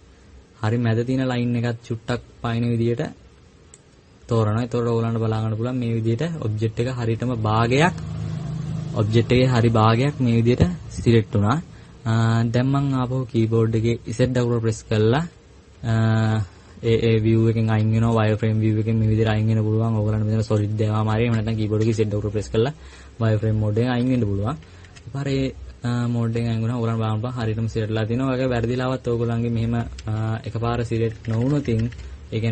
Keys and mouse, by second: 17.4 z, 18.1-20.1 drag, 23.1-24.2 middle drag, 24.7 KP_Add, 24.7 middle click, 24.9 KP_Add, 26.4 middle click, 29.4 KP_Subtract, 30.4 KP_Subtract, 30.9 KP_Subtract, 31.2-32.0 KP_Add.